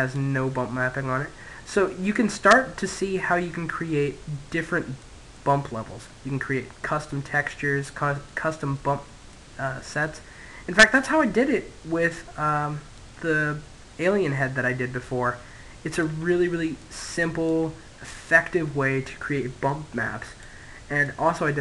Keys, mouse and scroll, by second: 0.8-1.5 scroll down 1, 1.5-3.8 middle drag, 4.0-5.4 middle drag, 5.4 click, 6.9-8.6 middle drag, 8.0 click, 10.0-11.7 middle drag, 11.7 click, 14.9 middle click, 15.5 click, 16.6-18.3 middle drag, 18.3-21.6 drag, 20.6-21.6 middle drag.